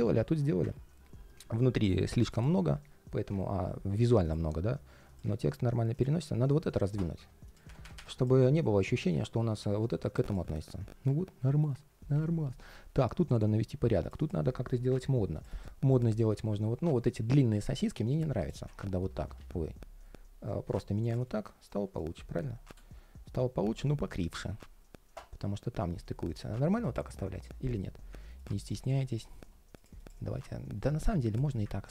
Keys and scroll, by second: 8.3 ctrl+shift+4, 10.2 ctrl+shift+4, 19.1 super+z, 21.0 ctrl+shift+4.